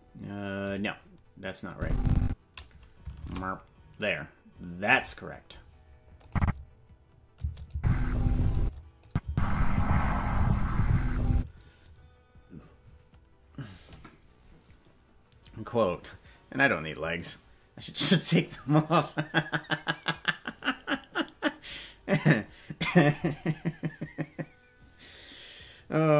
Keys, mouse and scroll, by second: 1.7 click, 3.2 shift+`, 6.2-8.8 drag, 6.4 space, 7.4 space, 7.7 space, 8.6 space, 9.0 click, 9.2 space, 11.3 space.